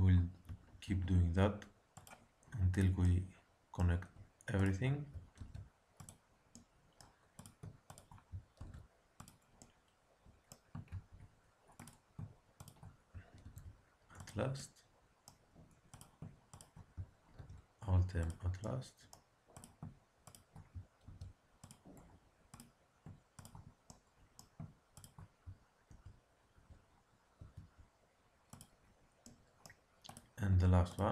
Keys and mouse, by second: 0.8 alt+m, 2.7 click, 3.0-4.2 middle drag, 4.2-6.2 drag, 5.3 alt+m, 6.5 middle click, 7.3-9.7 drag, 8.5 alt+m, 10.9 ctrl+z, 11.7-13.4 drag, 13.4 alt+m, 15.9-18.3 drag, 17.3 alt+m, 18.7 middle click, 19.5-21.3 drag, 21.0 alt+m, 21.9 click, 22.4-23.8 drag, 23.8 middle click, 24.3 click, 24.4 middle click, 24.5-26.7 drag, 25.8 alt+n, 27.3 alt+m, 30.0-31.1 drag.